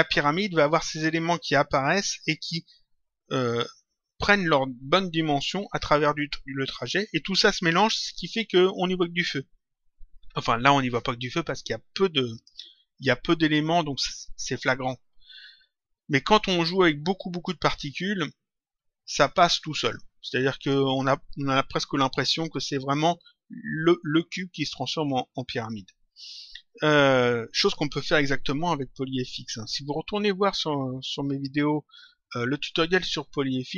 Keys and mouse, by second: 12.3 click, 19.3 click, 20.5 click.